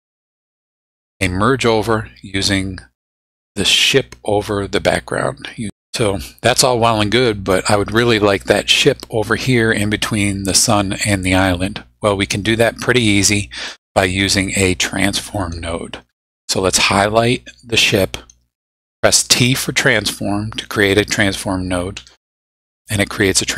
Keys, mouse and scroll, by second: 0.3 middle click, 12.9-13.9 drag, 14.5-15.6 drag, 16.8 click, 22.0 t.